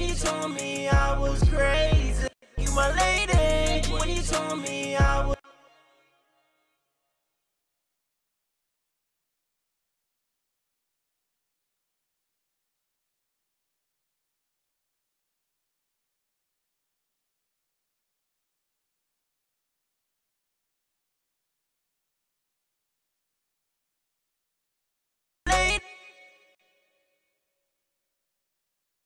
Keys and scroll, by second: 4.7 typing, 6.6 alt+shift+d, 13.7 typing, 16.3-17.3 typing, 24.8 typing.